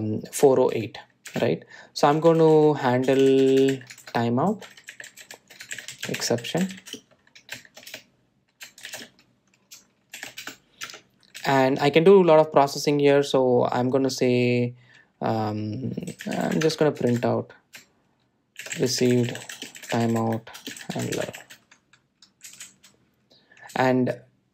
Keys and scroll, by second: 2.5 Return, 12.0 Tab, 17.8 Tab.